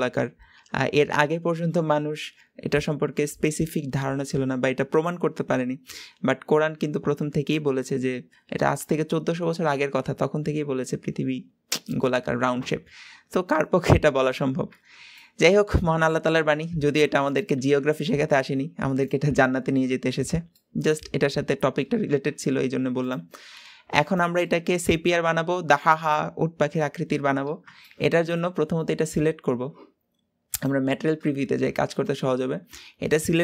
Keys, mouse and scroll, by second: 15.1-16.8 middle drag, 16.8 g, 20.5-22.0 middle drag, 22.0 r, 23.9 click, 24.4-27.3 middle drag, 27.3-27.7 scroll up 2, 27.7 shift+middle click, 28.5 scroll down 2, 28.7-30.6 middle drag, 30.6 click, 31.3-31.8 shift+middle drag, 31.8 scroll up 2, 32.0-33.4 middle drag.